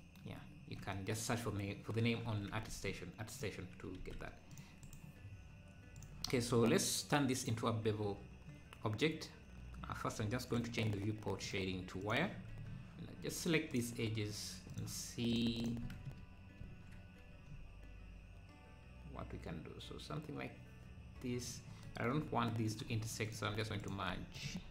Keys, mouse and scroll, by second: 0.4 `, 1.3 Tab, 2.3 Tab, 2.7 ctrl+a, 4.0 ctrl+a, 4.8-8.4 right drag, 8.4 scroll down 2, 10.0-10.5 scroll down 8, 10.5 click, 11.3 scroll down 3, 11.4-12.5 drag, 12.5 Tab, 13.7-16.5 drag, 16.6 ctrl+shift+b, 22.1 scroll up 1, 23.2-24.7 drag.